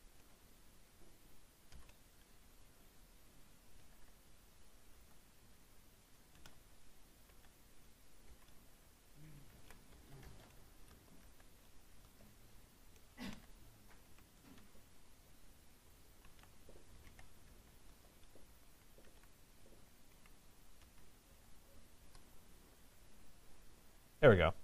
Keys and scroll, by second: 21.9 Return.